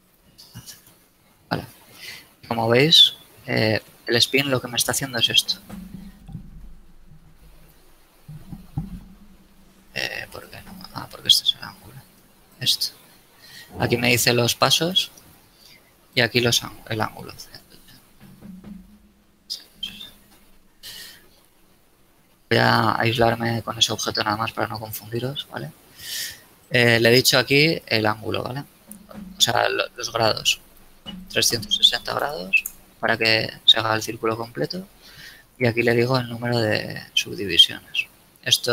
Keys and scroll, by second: 0.6 KP_Enter, 3.3 shift+z, 18.0 KP_0, 18.3 KP_Enter, 20.3 KP_3, 20.7 KP_0, 21.0 KP_Enter, 23.0 KP_Divide, 32.0 KP_3, 32.3 KP_0, 32.7 KP_Enter.